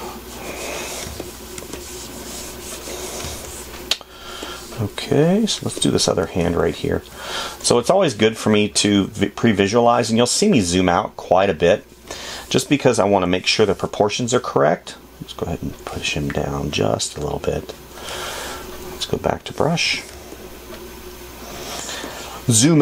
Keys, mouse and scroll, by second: 6.9 space.